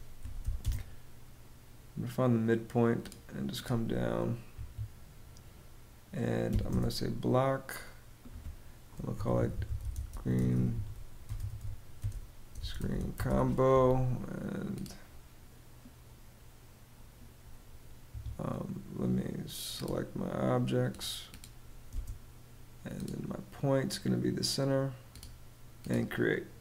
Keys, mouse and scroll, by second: 0.0-0.4 typing, 4.0 Escape, 6.0 b, 6.2 space, 8.4-13.3 typing, 17.6 Escape, 21.4 space.